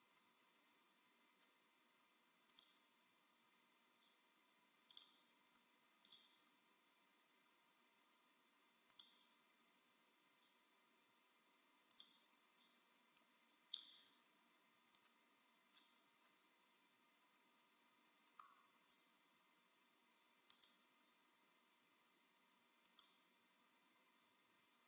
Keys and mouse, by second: 1.5 g, 2.5-4.0 drag, 3.3 s, 5.0-7.8 drag, 7.1 g, 9.0-10.5 drag, 9.8 s, 11.6 e, 12.0-13.7 drag, 14.3 middle click, 15.8-18.2 middle drag, 18.2-19.8 right drag, 19.5 e, 22.9-24.5 drag, 23.5 w.